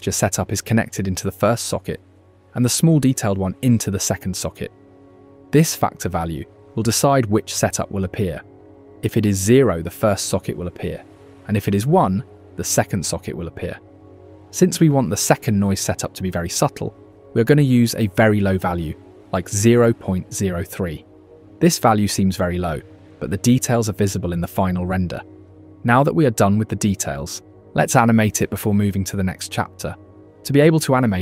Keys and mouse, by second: 0.4 click, 1.9 ctrl+shift+click, 3.0-4.5 drag, 5.6-6.8 drag, 11.7-14.8 drag, 19.9-22.2 drag, 30.5 middle click.